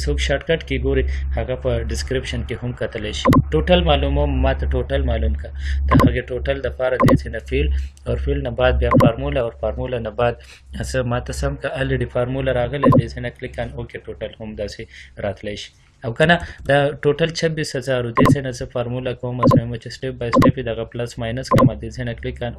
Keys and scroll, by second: 3.0 ctrl+c, 6.0 ctrl+v.